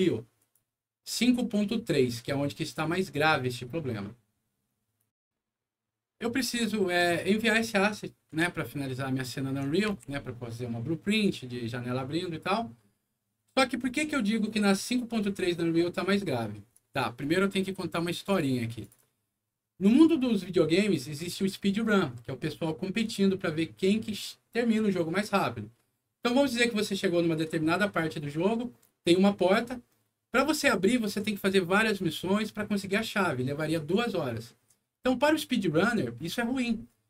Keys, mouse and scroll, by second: 0.3 click, 4.9 click, 7.0 click, 8.5-9.6 alt+middle drag, 9.9 w, 17.1 click, 18.2 click, 18.8 click, 19.3 middle click.